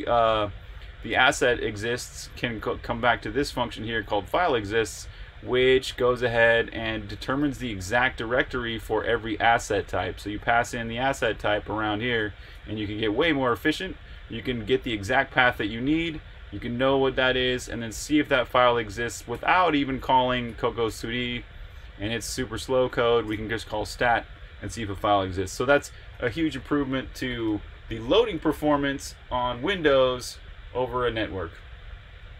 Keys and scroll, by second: 2.3-2.8 typing, 4.4-10.9 typing, 8.6 Escape, 11.3 alt+f, 12.5-18.3 typing, 20.4 1, 20.8 Return, 21.6 j, 21.7 j, 21.9 j, 23.3 shift+v, 27.4 Escape.